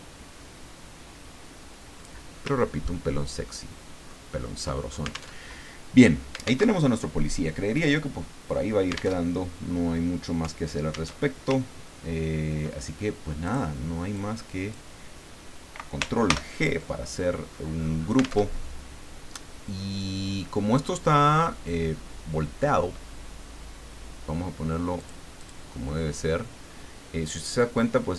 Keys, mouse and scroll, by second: 2.9-3.5 ctrl+scroll down 2, 3.5 ctrl+click, 5.3 alt+Tab, 6.6 alt+Tab, 9.1 alt+Tab, 11.1 alt+Tab, 11.7-12.3 ctrl+scroll down 2, 13.4 click, 14.2 click, 16.2 ctrl+g, 18.4 alt+Tab, 19.5-19.9 scroll down 2, 20.4-21.7 scroll down 6, 25.0 click, 25.4 click.